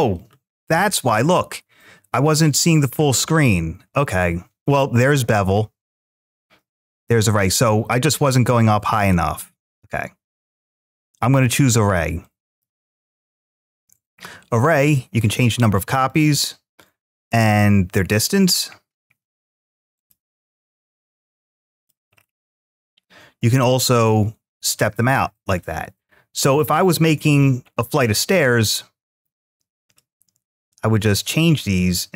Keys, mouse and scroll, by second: 8.8-12.4 drag, 14.7-15.9 drag, 16.8-18.0 drag, 18.3-18.7 scroll down 1, 19.8 click, 19.8 scroll down 2, 21.1-21.7 middle drag, 22.0-22.8 scroll down 4, 23.8-25.0 drag, 25.4-27.2 drag, 27.5-28.5 scroll up 1, 28.5-29.7 scroll up 1, 29.7-30.9 drag, 31.6-32.1 drag.